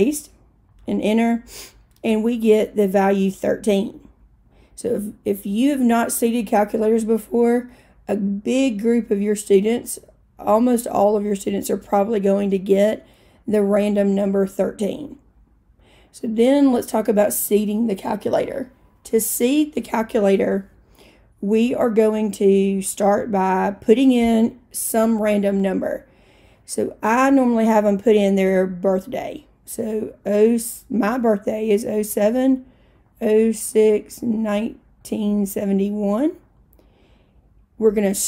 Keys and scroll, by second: 0.8 Return, 30.2 0, 32.2-36.4 typing.